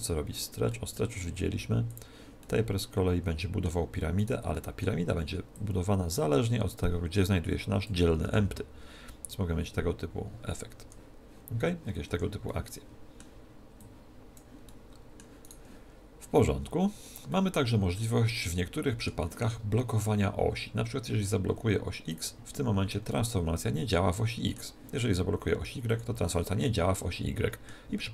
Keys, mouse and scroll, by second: 0.7-1.9 middle drag, 1.9 click, 3.7 middle click, 4.2-5.5 right drag, 4.5-6.1 middle drag, 6.1 click, 8.3 g, 12.5-14.1 middle drag, 13.8 click, 15.4-16.6 middle drag, 15.4 right click, 16.6 right click, 17.3-20.1 middle drag, 22.1 click, 23.8-24.9 middle drag, 25.9 click, 27.7-28.1 middle drag.